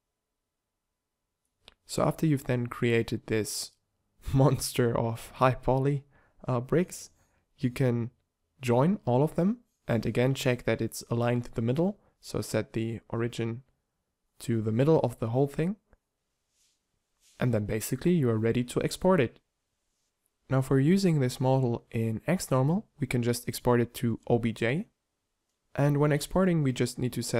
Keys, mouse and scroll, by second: 16.2 shift+c, 16.2 b, 18.2 z, 21.7 ctrl+j, 24.2-25.8 drag.